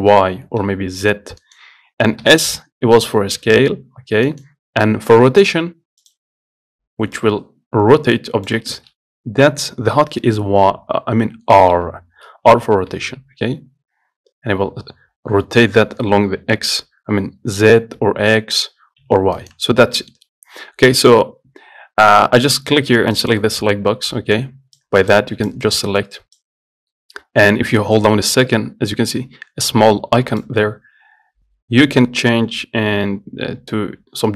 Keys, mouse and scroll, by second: 6.3-7.5 drag, 9.0 ctrl+z, 10.4-11.2 scroll down 2, 12.0 r, 19.9 scroll down 2, 20.2 middle click, 20.4-21.9 scroll up 2, 23.4 click, 24.2 scroll up 1, 24.4-25.0 scroll down 2, 25.0 click, 25.7-28.3 drag, 30.7-33.5 drag.